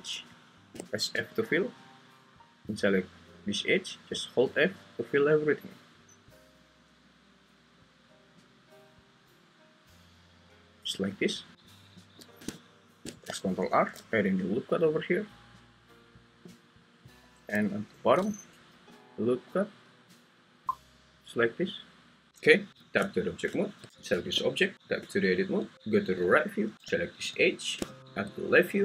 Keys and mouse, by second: 1.1 f, 4.1 f, 4.6-10.8 f, 13.7 ctrl+r, 16.9 click, 17.9 ctrl+r, 21.2 click, 22.7 `, 23.0 Tab, 23.8 `, 23.9 g, 24.7 Escape, 24.7 Tab, 24.7 `, 25.7 1, 25.7 `, 26.7 2, 28.0 `.